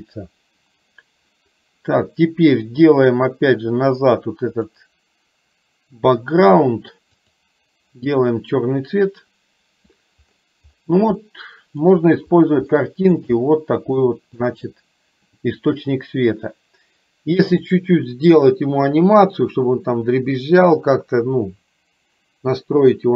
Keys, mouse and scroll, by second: 4.6 click, 11.2 middle click, 12.9-13.2 shift+middle drag, 14.1-14.5 shift+middle drag.